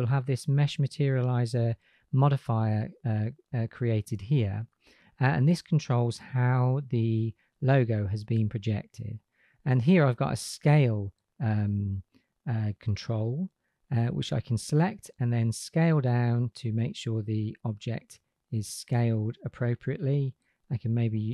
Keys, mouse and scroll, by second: 14.1-20.7 drag.